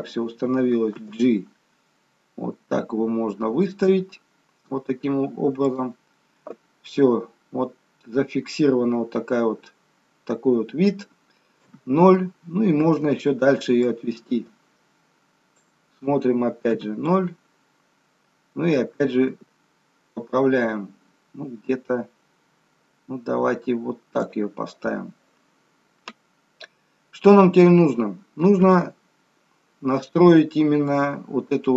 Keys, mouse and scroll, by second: 1.1 g, 7.9-8.3 scroll down 5, 8.8-9.5 scroll up 7, 9.5-9.9 scroll down 1, 11.7 KP_0, 13.8 click, 18.3 KP_0, 19.4 g, 28.7 KP_0.